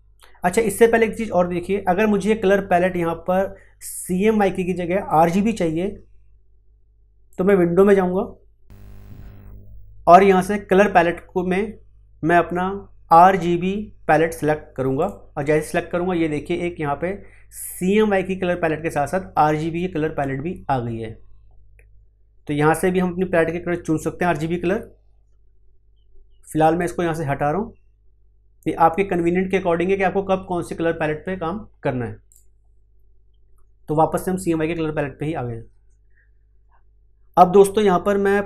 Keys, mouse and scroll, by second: 7.3 click, 14.9 click, 26.6 click, 32.2 click.